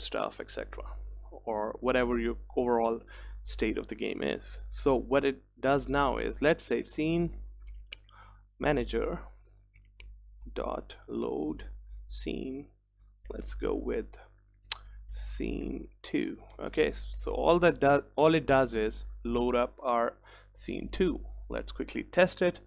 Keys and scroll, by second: 10.1 Return, 12.1 Return, 18.3 ctrl+s, 20.5 ctrl+s.